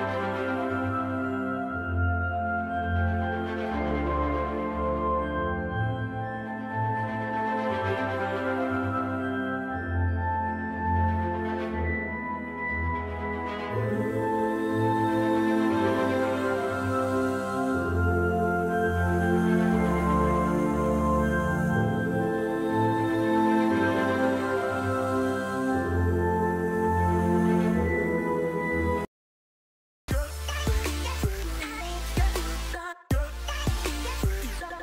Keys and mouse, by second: 3.4 click, 4.6 click, 5.4-6.5 right drag, 7.6 right click, 8.7-9.9 shift+middle drag, 11.5 shift+middle click, 12.7-14.6 ctrl+middle drag, 20.7 z, 21.0 F12.